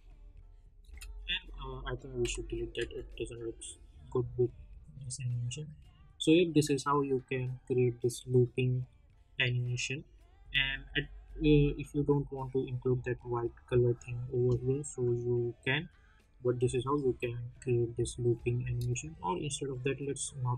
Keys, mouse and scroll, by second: 3.0 space, 10.8 space, 16.6 space, 18.9-20.5 drag.